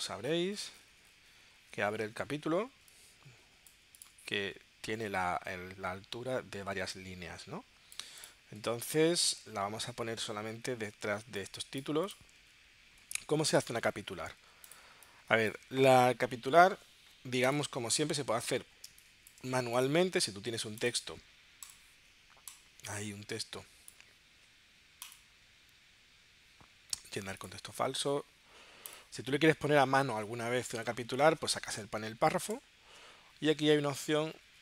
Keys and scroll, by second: 12.5 super+Tab, 14.9 space.